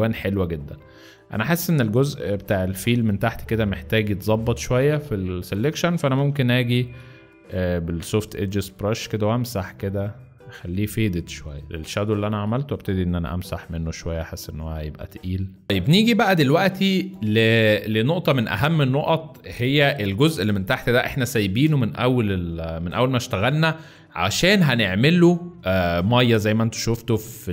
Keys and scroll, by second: 0.1 space, 0.6 z, 2.4 v, 6.1 b, 13.1-14.4 typing, 15.6 space, 18.5 space, 19.5 space, 20.4 space.